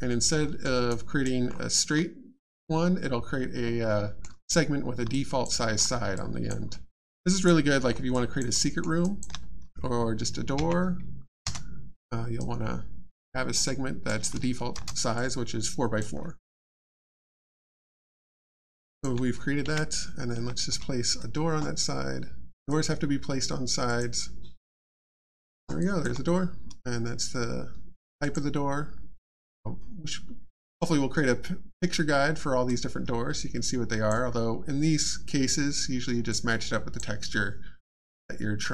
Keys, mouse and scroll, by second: 0.4 alt+middle click, 0.9 alt+click, 1.5-2.5 alt+scroll up 1, 3.9 middle click, 5.1 alt+click, 5.7 alt+scroll up 1, 6.1 alt+click, 6.7 alt+middle click, 6.9 alt+scroll down 1, 7.2 alt+click, 8.6 alt+middle click, 9.0 alt+click, 11.4 space, 12.4 right click, 14.7 shift+space, 15.1 alt+click, 16.6 alt+middle click, 17.5 alt+click, 18.2 alt+middle click, 18.4-18.8 alt+scroll down 1, 18.8 alt+click, 19.6 click, 22.7 click, 23.8 click, 25.8 alt+click, 28.2 click, 32.6 click, 36.3 click, 38.0 click.